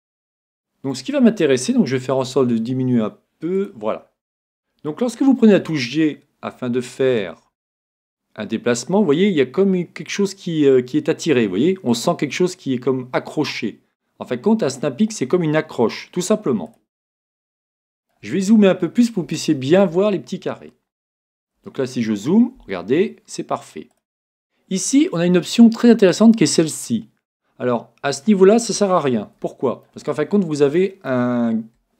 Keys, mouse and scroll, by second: 0.3-2.0 middle drag, 2.2 s, 3.7-5.4 drag, 4.0-5.6 middle drag, 5.6 g, 16.8-18.5 drag, 17.7-21.9 middle drag, 21.6 g, 24.0-25.9 drag, 28.1-29.5 middle drag.